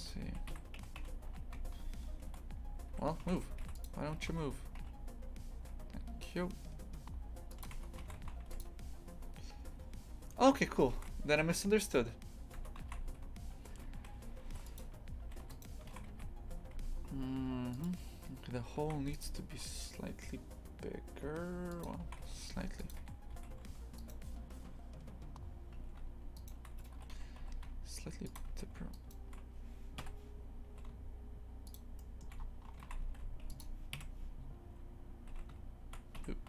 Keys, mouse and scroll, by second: 0.2 e, 3.2 shift+f, 4.2 g, 7.7 Tab, 8.0 shift+f, 12.5 Tab, 12.8 shift+f, 15.5 right click, 15.9 shift+f, 18.8 shift+f, 21.8 click, 22.0 shift+f, 23.3 a, 23.9-25.7 alt+shift+right drag, 25.7 a, 26.3 alt+shift+right click, 27.0 g, 28.9-30.0 alt+shift+right drag, 30.0 KP_3, 30.7 s, 32.0 shift+middle click, 32.4 scroll up 1, 32.8 shift+f, 33.9 KP_Decimal, 35.3 s.